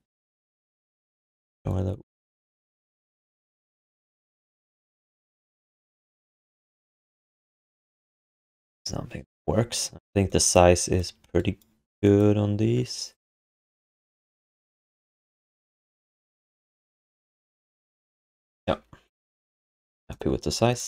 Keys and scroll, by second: 1.5 ctrl+d.